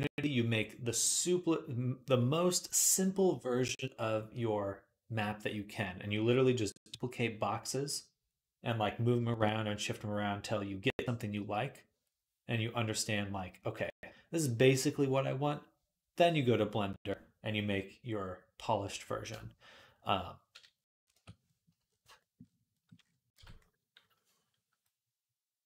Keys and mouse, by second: 21.0 Tab, 23.2 Tab, 24.7-25.6 drag.